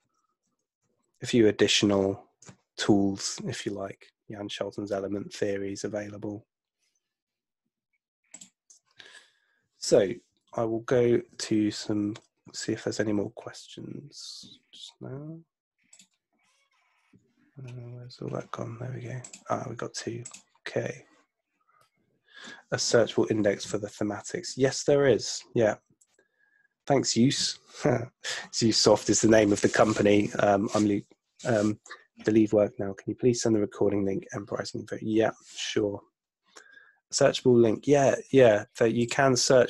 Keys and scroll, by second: 0.5 Return, 15.2 ⟲.